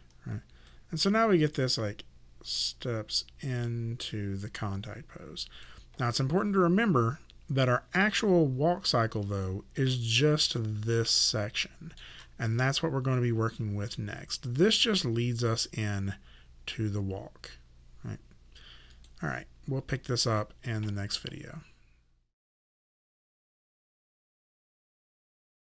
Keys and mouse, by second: 0.7 click, 9.8 shift+middle click, 14.9 click.